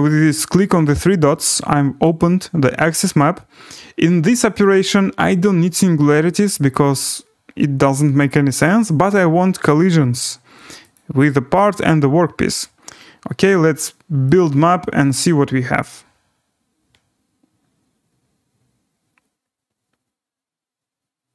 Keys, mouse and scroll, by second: 2.0 click, 6.1 click, 9.9 click, 10.9 click, 11.7 click, 14.4 click.